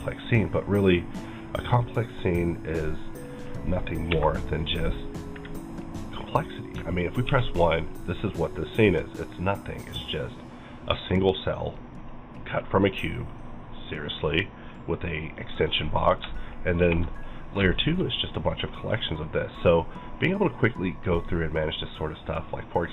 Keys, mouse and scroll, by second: 1.4 right click, 2.7 click, 3.2 middle click, 4.1 KP_Divide, 4.9-6.7 middle drag, 6.9-7.2 shift+middle drag, 7.2 1, 7.6-7.9 middle drag, 7.9-8.3 scroll down 3, 8.3-9.3 middle drag, 12.4-13.2 scroll up 1, 14.3-15.9 middle drag, 15.9-16.4 scroll up 3, 16.4 shift+middle click, 16.8 shift+@, 17.2 middle click, 17.7 shift+middle click, 18.1-18.4 scroll up 2, 18.4-21.4 middle drag.